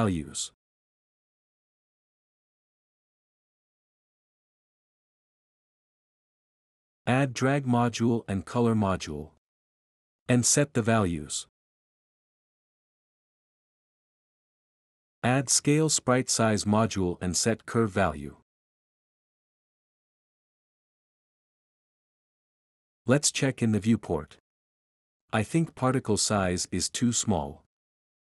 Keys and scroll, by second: 1.4-17.2 typing, 27.0-28.3 typing.